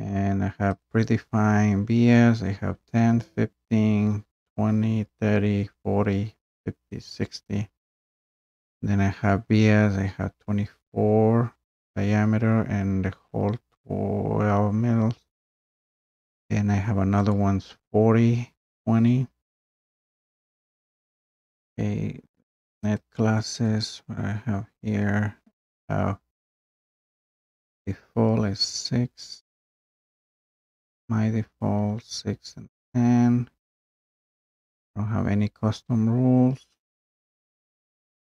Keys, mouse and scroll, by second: 0.9 click, 2.6-3.6 drag, 5.1-6.3 drag, 17.3-22.3 drag, 23.7 click, 33.9 click.